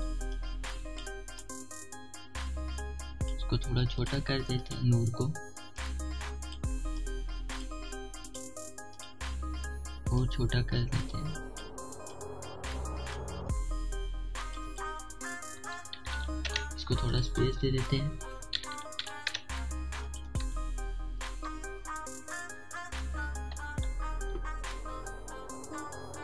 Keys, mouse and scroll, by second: 1.0-4.6 alt+shift+drag, 6.4-8.9 alt+shift+drag, 10.8-15.1 alt+shift+drag, 16.2 typing, 17.1 Return, 17.8 click, 18.9 typing, 20.2 click, 20.6 typing, 22.3 0, 22.8 click, 23.3 2, 24.5 click.